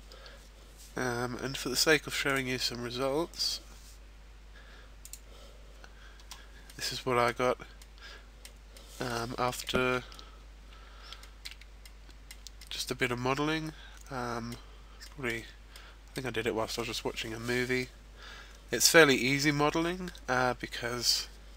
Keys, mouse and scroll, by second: 2.2 click.